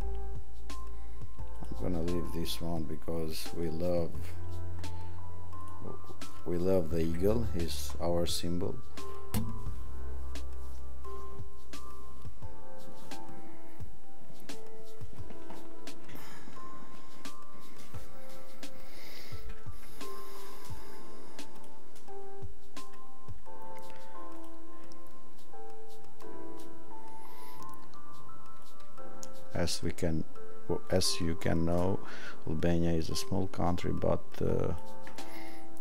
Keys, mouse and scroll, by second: 28.6 click, 35.4 click.